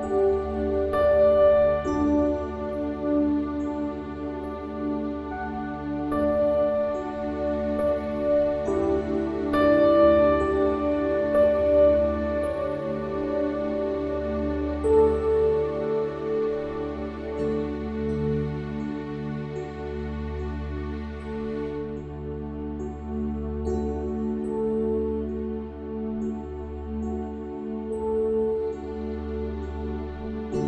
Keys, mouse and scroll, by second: 5.0 s, 9.8-11.8 middle drag, 13.2-15.1 drag, 15.6-19.6 middle drag, 19.8-21.5 middle drag, 22.3-25.0 middle drag.